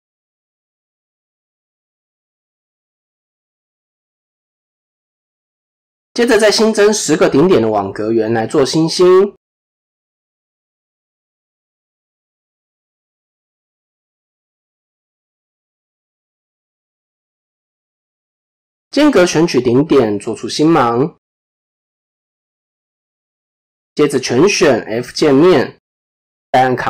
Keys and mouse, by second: 2.5 click, 5.1 KP_7, 6.4 shift+a, 10.2-11.3 drag, 14.2 Tab, 15.4 shift+middle click, 17.2 click, 19.3 shift+click, 20.2 s, 23.5 a, 25.2 f, 26.4 ctrl+f.